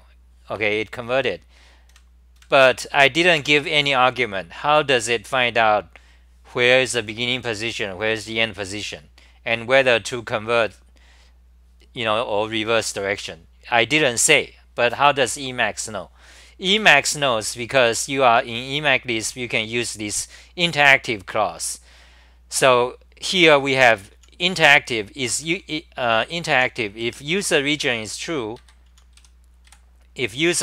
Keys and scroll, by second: 1.9 super+=, 2.4 super+=, 17.1 ctrl+g, 17.1-19.8 typing, 22.6 ctrl+g, 23.4 1, 23.8 ctrl+g, 24.6-27.4 typing, 25.4 ctrl+g, 28.6 ctrl+g, 28.7-30.2 typing.